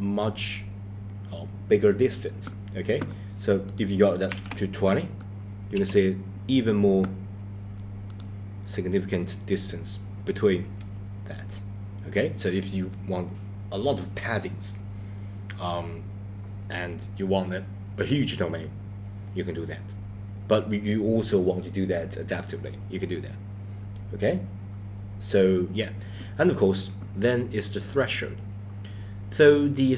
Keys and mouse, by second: 3.7-5.8 drag, 8.1-8.4 drag, 27.8 click.